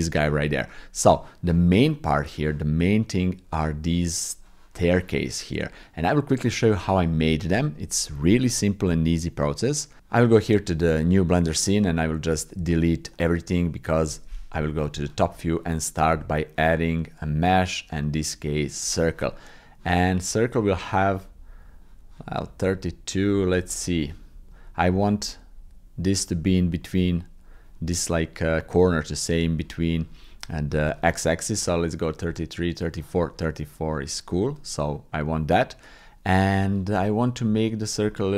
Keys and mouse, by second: 3.1 click, 4.0 middle click, 5.8 middle click, 7.6 middle click, 10.5 shift+middle click, 11.0 middle click, 11.7 a, 12.5 x, 14.6 KP_7, 15.6 shift+click, 16.0 shift+a, 20.6 click, 24.0 shift+middle click, 32.0 click, 36.7 shift+click, 38.1 shift+click.